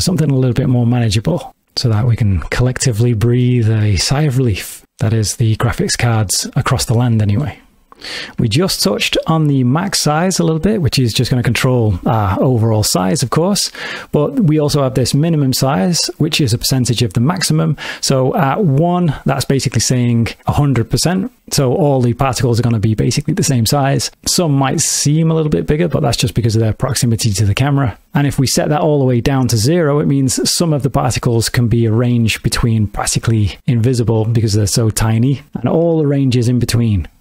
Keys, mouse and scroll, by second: 1.0 click, 2.0 ctrl+middle click, 3.8 shift+middle click, 4.6 ctrl+middle click, 5.5 middle click, 7.9 click, 7.9 space, 10.1 click, 18.3 click, 25.7 middle click, 28.3 click.